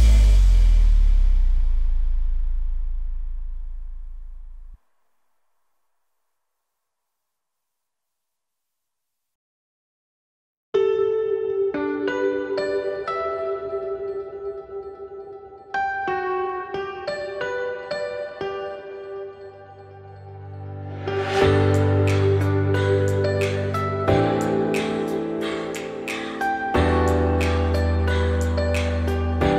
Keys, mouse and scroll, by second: 3.7 click, 5.5 3, 6.0 click, 7.0 scroll up 1, 7.1 shift+middle click, 7.4 z, 8.3 shift+click, 8.8 z, 9.6 `, 10.1 shift+middle click, 10.5 scroll up 3, 11.1 i, 13.7 scroll down 2, 13.9 middle click, 14.2 x, 15.0 s, 16.7 shift+middle click, 16.9 scroll up 3, 17.1 x, 18.2 2, 18.5 click, 18.9 shift+click, 19.2-19.8 scroll down 2, 19.8-22.1 typing, 21.3 click, 22.5-25.6 middle drag, 25.6 ctrl+r, 26.5 middle click, 26.8 ctrl+r, 27.5 ctrl+r, 28.2 ctrl+r, 29.1 middle click.